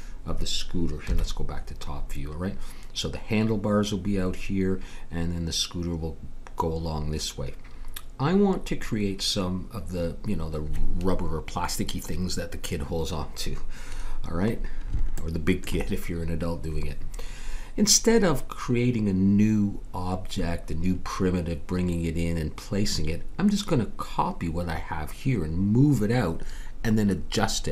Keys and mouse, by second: 1.0 KP_7, 14.5-17.2 middle drag.